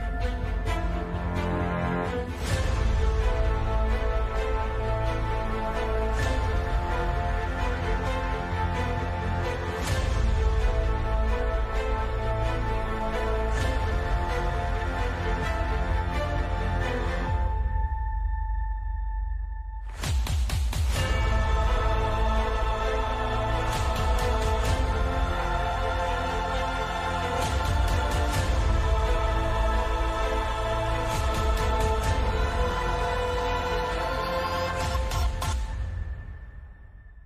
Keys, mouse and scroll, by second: 0.3 Tab, 0.7 g, 1.4 h, 1.7 Tab, 2.5 KP_5, 4.6 ctrl+KP_Add, 5.5 b, 6.6 z, 7.4 b, 8.3 z, 8.9 middle click, 9.5 middle click, 9.7 b, 10.9-14.8 drag, 14.8 ctrl+z, 15.8-17.1 shift+right drag, 17.1 middle click, 17.4 e, 20.7 middle click, 20.9 Tab, 21.7 shift+z, 24.0 shift+z, 25.0 alt+h, 25.2-25.8 drag, 25.3 x, 26.3 right click, 26.4 KP_Decimal, 27.1 KP_5, 27.5 alt+c, 28.2 right click, 28.4 Tab, 28.7 space, 29.3 Tab, 29.8 x, 30.2 Tab, 30.6 Tab, 32.5-36.7 typing, 34.5 middle click, 34.8 middle click, 36.2 middle click.